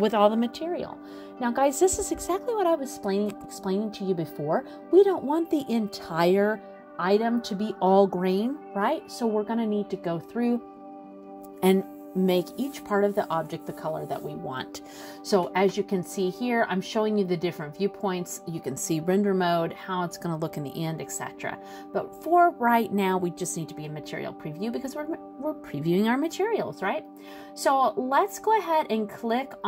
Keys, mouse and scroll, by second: 12.5 click, 17.5 click, 21.1 scroll down 1, 21.7 scroll up 2, 22.9-24.0 scroll down 1, 24.3 scroll down 1, 24.6 middle click, 25.4-26.0 scroll up 2, 26.1 middle click, 26.5 shift+middle click, 28.0-28.5 scroll up 2, 29.3 click.